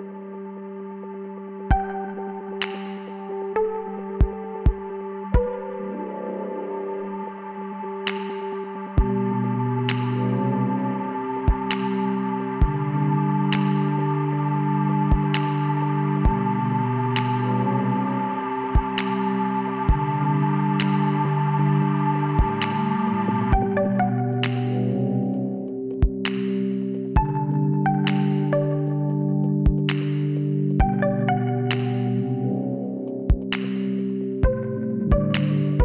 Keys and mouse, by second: 1.6 s, 4.5 e, 5.6-7.4 drag, 8.0 s, 10.7-13.5 drag, 12.5 w, 17.1-18.8 middle drag, 18.2 e, 22.6 middle click, 24.6 click, 25.1 KP_1, 26.8 s, 31.2-32.7 middle drag, 32.7-34.4 drag.